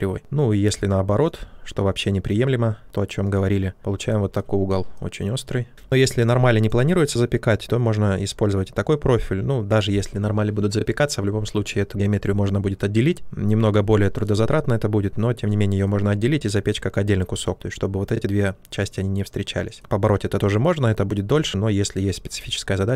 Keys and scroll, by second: 22.3 ctrl+z.